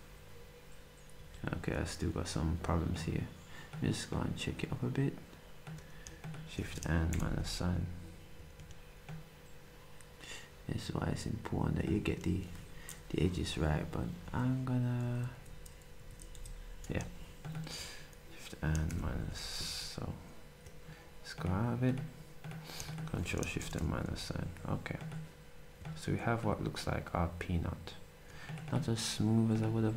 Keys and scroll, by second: 1.2 z, 7.1 ctrl+shift+-, 8.6 z, 16.0 Left, 16.3 Up, 18.9 -.